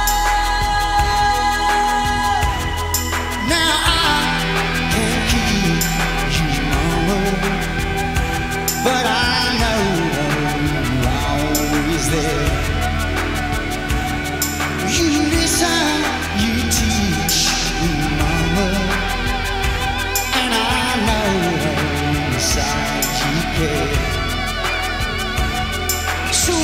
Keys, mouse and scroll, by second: 1.3 s, 3.6 Tab, 8.4 Tab, 11.0 s, 17.7 s, 20.4 Tab, 24.6-26.6 drag.